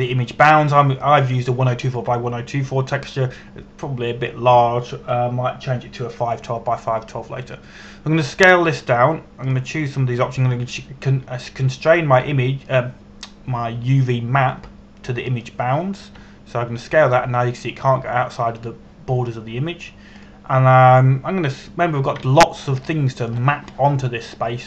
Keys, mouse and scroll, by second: 11.1 click, 16.9 click, 17.8 s, 21.8 click, 24.5 shift+middle click.